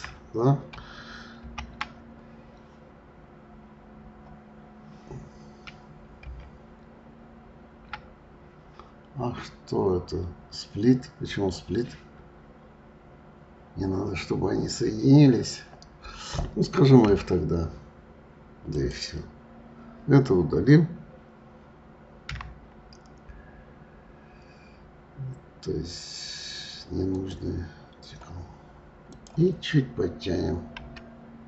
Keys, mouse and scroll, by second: 1.4 alt+m, 6.3 alt+m, 18.7 click, 22.3 Delete, 29.1 click, 30.8 g.